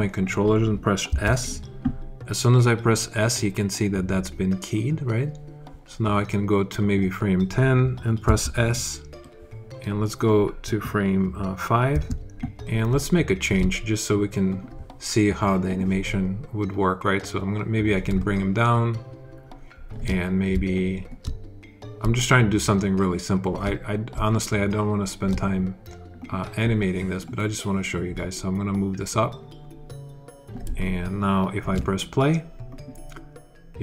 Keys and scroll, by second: 0.9 s, 8.1 s, 11.8 s, 12.7 alt+s.